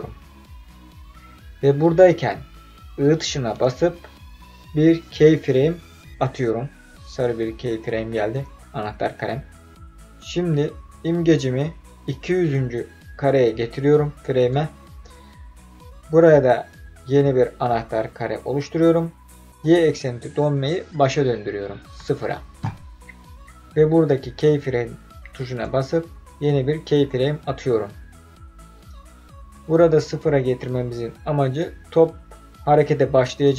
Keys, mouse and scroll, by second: 10.3-14.4 drag, 19.6-22.0 drag, 25.3 click.